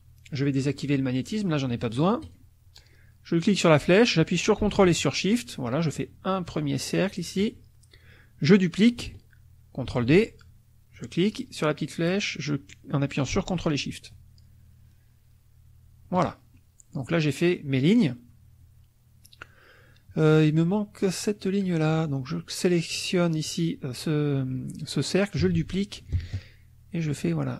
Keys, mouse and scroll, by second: 2.2 click, 3.4-7.4 drag, 9.9 ctrl+d, 10.9-16.3 drag, 16.6 ctrl+shift+middle click, 21.9 click, 25.5 ctrl+d, 26.2-27.5 ctrl+shift+drag.